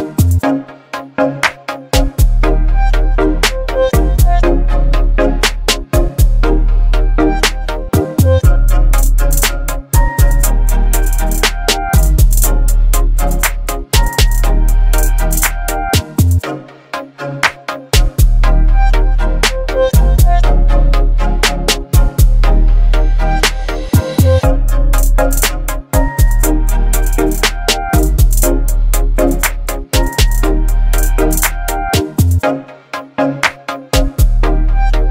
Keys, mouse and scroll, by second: 2.3-7.0 drag, 9.3 shift+click, 10.4 click, 11.6 ctrl+click, 12.9 ctrl+g, 14.5 click, 16.5-18.3 typing, 19.7-21.0 drag, 21.6 ctrl+t, 23.3-26.7 drag.